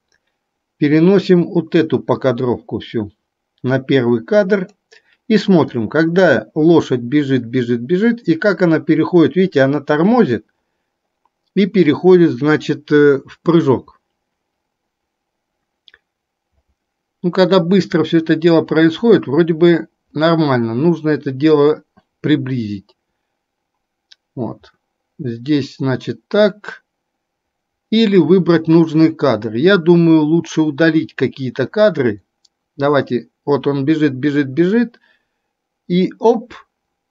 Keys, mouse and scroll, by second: 6.2-37.1 drag.